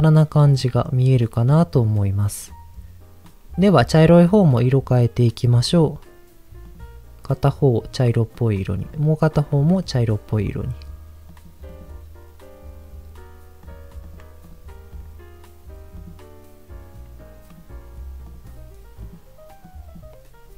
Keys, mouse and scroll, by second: 0.6 middle click, 1.5 middle click, 3.2 click, 5.5 click, 8.3 click, 8.8 click, 13.6 click, 14.0 click, 14.4 click, 14.9 click, 17.5 click, 18.2 click.